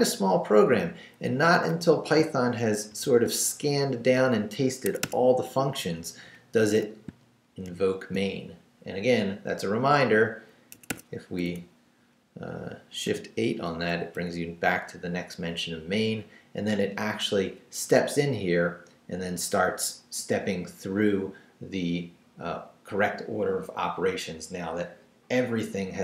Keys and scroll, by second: 1.4 Up, 2.2 shift+Up, 3.4 shift+Down, 4.0 Down, 4.8 Escape, 5.4 Down, 7.1 shift+Down, 7.7 shift+v, 10.7 Escape, 11.3 Right, 13.0 shift+8, 14.0 shift+Left, 14.1 Right, 17.3 Down.